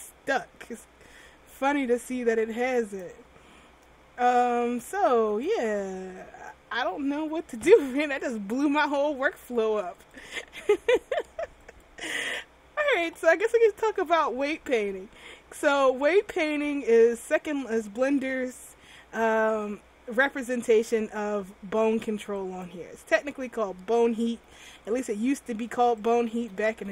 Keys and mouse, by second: 3.0 click, 3.6 r, 5.2 a, 5.4 a, 5.7 alt+r, 10.2-13.1 drag, 22.6-26.3 right drag, 24.8 r, 26.4 a, 26.6 a.